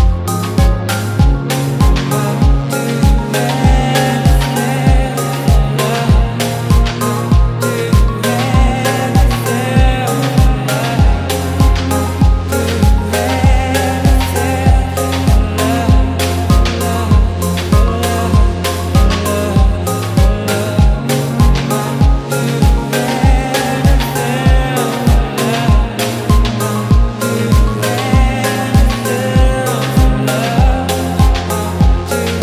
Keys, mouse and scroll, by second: 0.2 click, 1.5 right click, 4.2 ctrl+v, 5.7 right click, 7.8 click, 8.9 click, 9.9 click, 19.6 click, 21.1-24.0 drag, 24.8-25.9 drag, 26.0-27.7 drag, 29.6-31.1 right drag, 31.8-32.4 right drag.